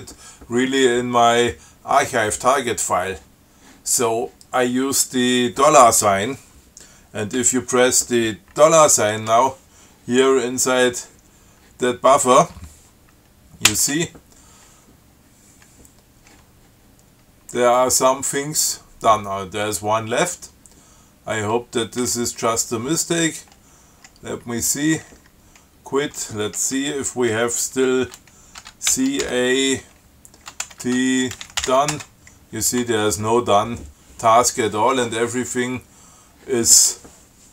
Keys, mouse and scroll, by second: 13.9 shift+4, 17.4 scroll down 2, 17.8 scroll up 2, 22.3 q, 25.4 q, 29.1 ctrl+shift+c, 29.5 ctrl+shift+a, 30.9-33.1 typing.